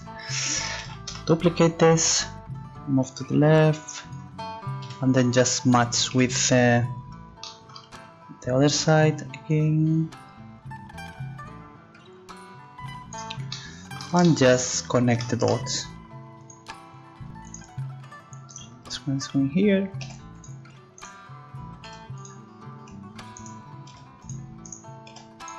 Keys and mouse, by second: 0.8 shift+d, 3.2 click, 4.8 KP_3, 6.1 KP_1, 9.5 middle click, 16.4-18.5 drag, 18.5-20.8 right drag, 20.0 c, 21.0-22.0 drag, 21.8 g, 22.0 right click, 23.4 right click, 23.5 click, 23.9 g, 25.1 g.